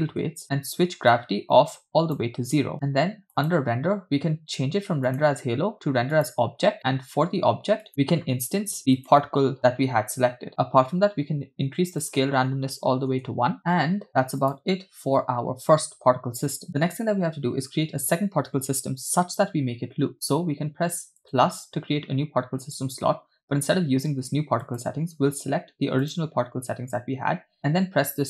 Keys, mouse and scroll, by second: 0.4-1.1 scroll down 3, 1.2-2.2 drag, 2.8 click, 3.4 click, 4.1 scroll down 1, 5.1-6.5 drag, 10.5-12.0 scroll down 1, 12.1-13.3 drag, 13.7-14.0 scroll down 6, 14.5 click, 16.7-17.8 scroll up 3, 21.3 click, 24.7 click.